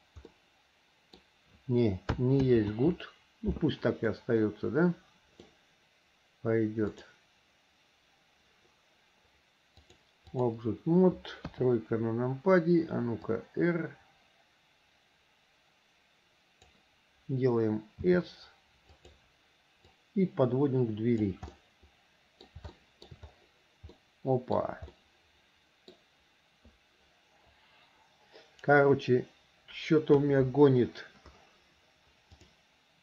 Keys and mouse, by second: 0.6 click, 0.6 right click, 2.6 ctrl+z, 4.3-5.7 middle drag, 7.1 click, 10.0 click, 11.6 KP_3, 13.4 click, 13.9-17.0 drag, 18.1 s, 20.2-21.4 drag, 21.7 middle click, 22.9 shift+middle click, 24.1 middle click, 25.1-26.1 middle drag, 28.9 Delete, 30.3 KP_1, 32.5-33.0 drag.